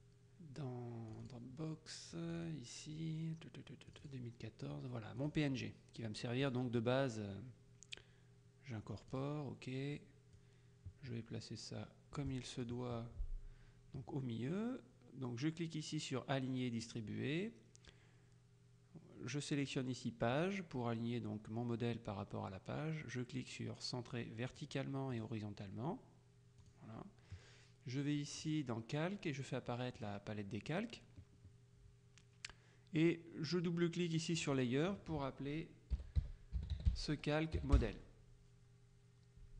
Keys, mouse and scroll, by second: 1.2 click, 2.3 click, 4.0 click, 5.3 click, 6.5 click, 9.2 click, 10.5-13.3 drag, 16.9 click, 19.7-21.0 drag, 24.6 click, 26.7 click, 28.5 click, 30.0 click, 34.5 click, 35.8-37.6 typing, 37.9 Return.